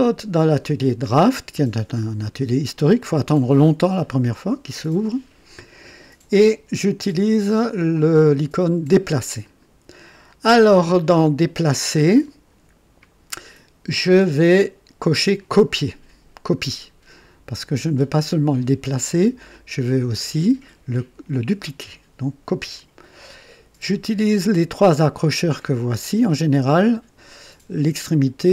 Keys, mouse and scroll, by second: 0.0 click, 3.1 click, 9.4 click, 15.8 click.